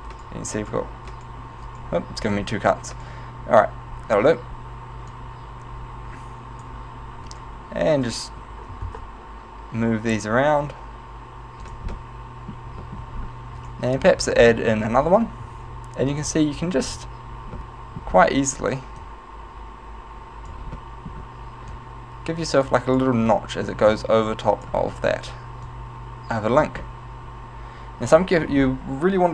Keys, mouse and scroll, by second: 0.2 right click, 0.6 right click, 1.2 right click, 1.7 right click, 2.4 right click, 3.0 right click, 5.3 click, 7.4 right click, 8.4 g, 11.9 click, 12.0 middle click, 13.0 shift+middle click, 13.2-13.6 scroll up 3, 13.6 right click, 14.2 right click, 14.4-14.8 scroll down 3, 15.0 shift+right click, 15.5 w, 16.9 right click, 17.6 middle click, 18.2-18.8 scroll up 2, 19.2 click, 20.8 middle click, 21.9 click, 23.3 right click, 24.0 click, 25.9 click, 27.0 middle click.